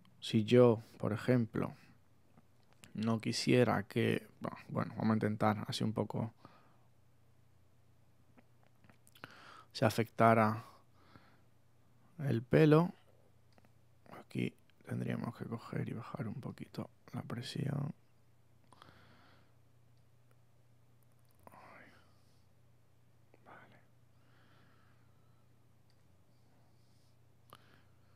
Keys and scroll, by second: 2.7 super+z, 5.3 super+z.